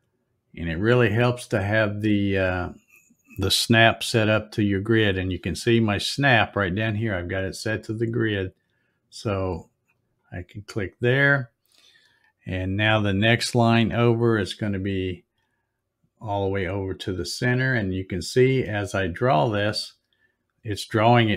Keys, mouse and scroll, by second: 9.9 click, 18.3 click.